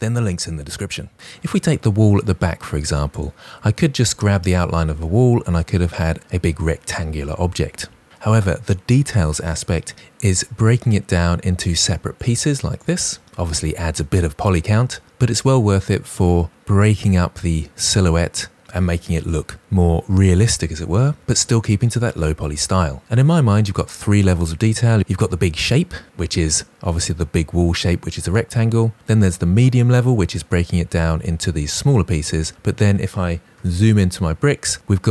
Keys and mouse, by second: 11.0 click, 12.7 click, 33.0 KP_Decimal.